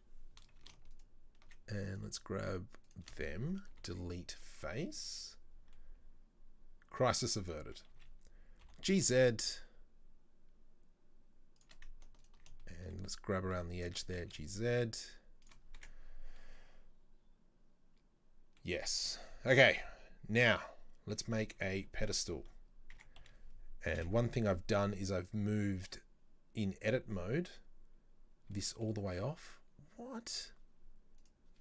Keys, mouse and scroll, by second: 1.0 alt+shift+right click, 2.0 shift+right click, 2.2 shift+right click, 2.9 shift+right click, 3.8 Delete, 5.0 z, 5.6 scroll down 2, 5.8-7.3 middle drag, 7.3-8.0 scroll up 1, 8.0 a, 8.7 g, 12.3 alt+right click, 12.7-13.9 shift+middle drag, 13.9 e, 15.7 scroll down 3, 15.9 Tab, 16.4-21.2 middle drag, 21.7 shift+a, 22.7 scroll down 3, 23.0 Tab, 23.3 a, 24.0 KP_7, 27.0-28.6 scroll up 5, 28.6-30.3 shift+middle drag, 30.3 right click, 31.3 right click.